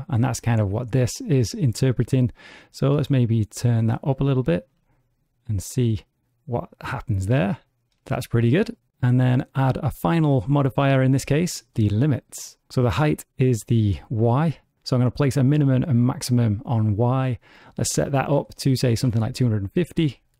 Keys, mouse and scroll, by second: 2.3 click, 4.3 space, 8.3 space, 8.9 click, 12.4 scroll up 1, 12.5-13.1 scroll down 8, 14.5 click, 14.7 click, 17.5 click.